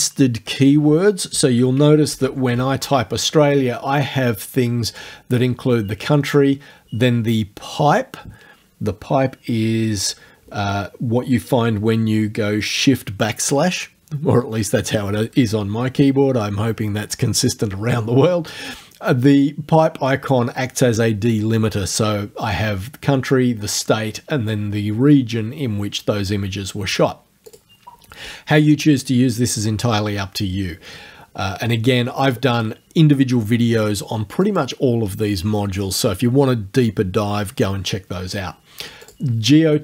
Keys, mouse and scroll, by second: 1.6-3.0 typing, 27.5 click, 34.5 click, 39.0 click.